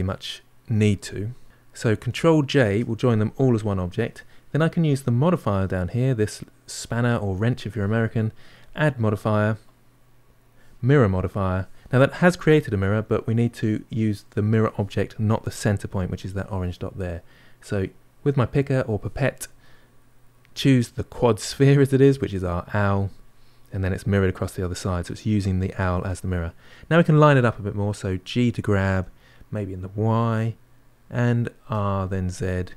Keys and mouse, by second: 2.4 ctrl+j, 11.0-18.9 drag, 24.1-28.7 middle drag, 28.7 g, 31.6 r.